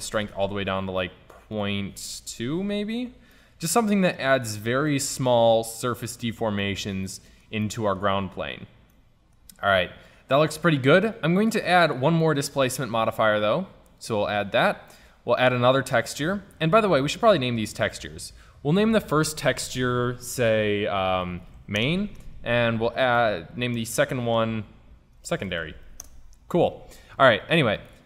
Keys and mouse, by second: 3.7-5.1 middle drag, 7.7 click, 11.9-14.4 drag, 15.4-17.2 drag.